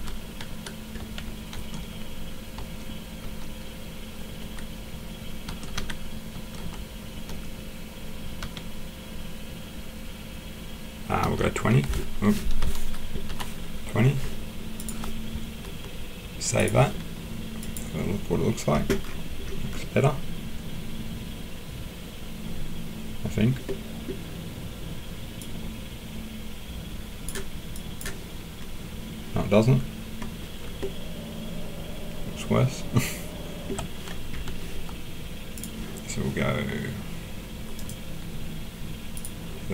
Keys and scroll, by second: 1.0 5, 1.5 BackSpace, 2.5 BackSpace, 3.2 BackSpace, 4.4 9, 5.4-7.3 typing, 8.4 1, 11.2-11.6 typing, 12.6 BackSpace, 13.3 BackSpace.